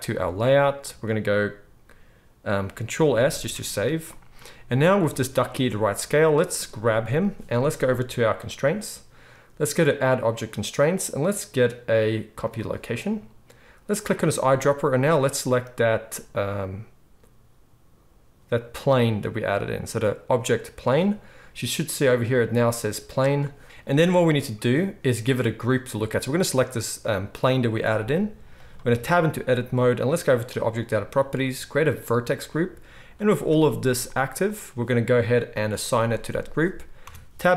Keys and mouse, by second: 3.1 ctrl+s, 3.4 ctrl+s, 4.9-7.3 right drag, 6.9 g, 7.3-10.0 middle drag, 10.0-14.0 drag, 14.0-22.4 middle drag, 22.4-26.5 drag, 26.5 middle click, 26.9 click, 27.0-30.4 middle drag, 28.0 g, 28.8 Tab, 30.4 click, 30.6-32.0 middle drag, 32.0-37.5 drag, 33.7 z, 37.0 Tab.